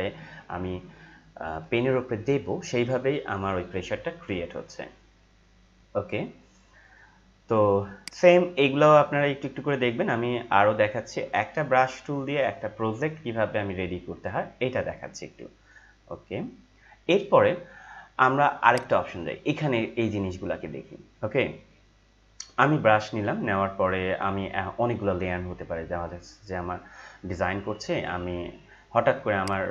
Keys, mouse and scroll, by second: 8.1 right click, 18.7 click, 29.4-29.7 drag.